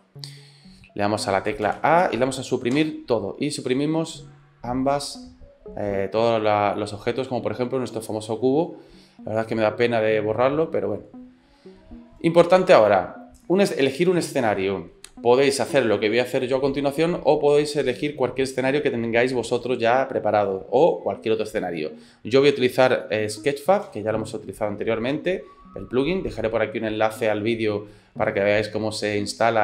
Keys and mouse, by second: 1.7 a, 2.8 Delete, 23.9 n.